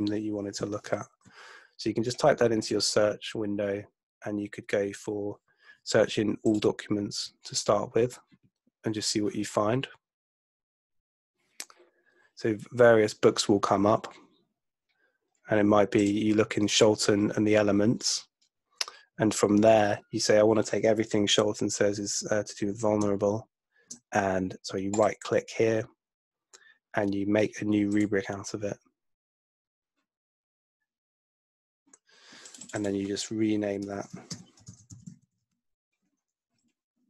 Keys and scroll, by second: 34.0-36.0 typing.